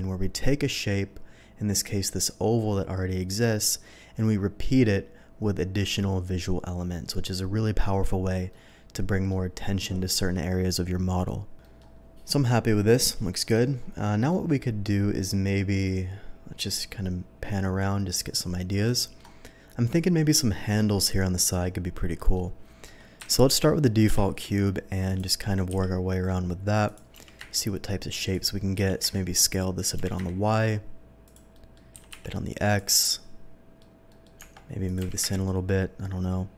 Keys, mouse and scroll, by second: 3.5 middle click, 6.9 middle drag, 8.5-9.3 middle drag, 11.6 middle drag, 12.2-13.6 middle drag, 14.3-19.1 middle drag, 19.4-22.1 scroll down 1, 22.1 middle drag, 23.2 KP_7, 24.1 shift+a, 25.0 click, 25.6 s, 26.8 click, 27.1 g, 27.3 y, 28.3 click, 28.8-30.1 typing, 29.7 click, 31.2 click, 31.5 middle click, 31.9 s, 32.1 x, 32.2 s, 32.6 click, 32.9 middle click, 34.1 middle click, 34.3 Tab, 34.8 click, 35.0 g, 35.2 y.